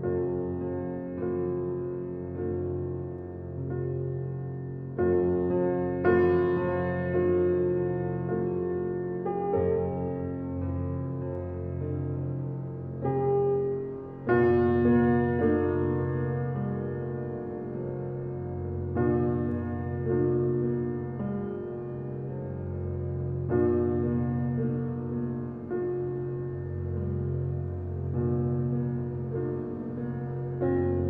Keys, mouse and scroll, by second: 6.9-9.5 drag, 9.5-10.9 alt+right drag, 10.9-12.3 drag, 12.3 x, 13.0-14.3 drag, 14.3 ctrl+alt+scroll up 1, 15.2-16.2 ctrl+alt+scroll up 1, 18.1 space, 20.9 click, 21.3 space, 22.1 x, 22.6-24.9 alt+right drag, 24.9-31.0 drag.